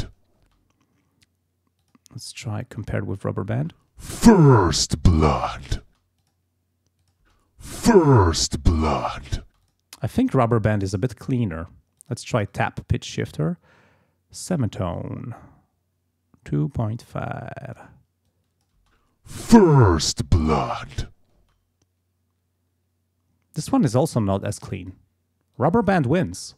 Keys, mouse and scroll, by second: 0.4 space, 1.8 click, 3.6 space, 5.9 space, 6.2 click, 7.2 space, 9.5 space, 9.6 click, 10.9 click, 12.0 click, 12.4 click, 15.0-18.0 drag, 18.3 click, 18.8 space, 21.4 space, 24.8 click, 25.6 click, 26.3 space.